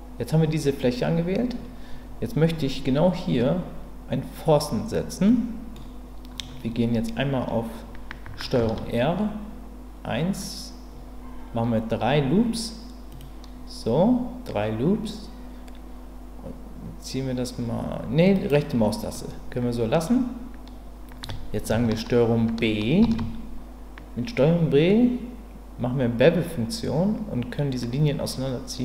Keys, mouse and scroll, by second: 5.3 middle click, 8.6 ctrl+r, 19.2 middle click, 23.0 ctrl+b.